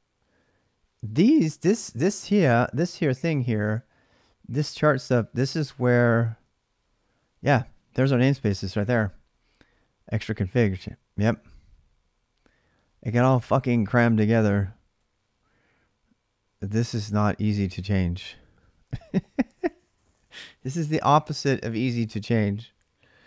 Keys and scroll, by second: 1.3-2.0 typing, 2.2 Tab, 2.7 Return, 3.3 ctrl+[, 3.3 ctrl+j, 4.2-9.0 typing, 14.1 j, 14.8 k.